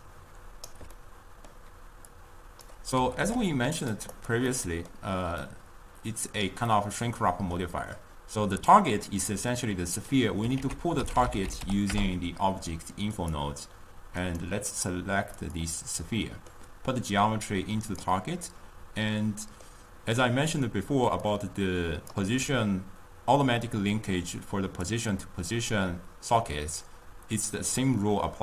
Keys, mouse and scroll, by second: 0.8 d, 0.9 d, 1.3-2.4 middle drag, 2.4 click, 3.0 g, 4.2 click, 4.7 middle click, 5.6 click, 6.9-10.1 middle drag, 10.8 ctrl+a, 14.2 click, 16.5-17.4 middle drag, 17.4-18.7 drag, 18.7-21.4 middle drag, 21.4 d, 21.4 click, 22.4 d, 24.0 click, 25.6-28.4 drag.